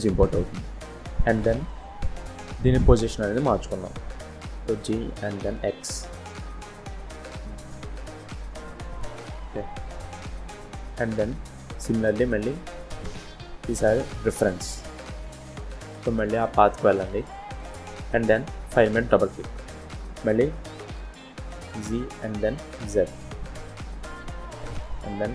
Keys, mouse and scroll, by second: 4.2 g, 11.1 shift+a, 21.5 g, 25.2 g.